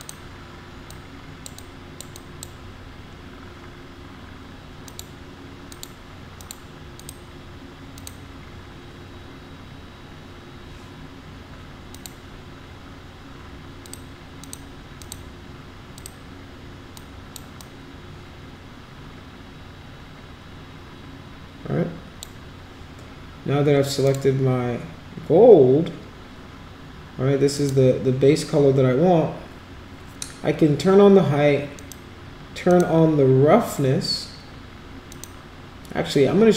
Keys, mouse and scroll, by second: 0.0 click, 0.9-1.5 drag, 1.6-2.0 drag, 2.2 drag, 4.9 click, 5.7 click, 6.4 click, 7.0 click, 8.0 click, 11.9 click, 13.8 click, 14.4 click, 15.0 click, 16.0 click, 17.0 click, 17.6-22.2 drag, 24.1 click, 27.6 click, 31.8 click, 32.7 click, 35.1 click.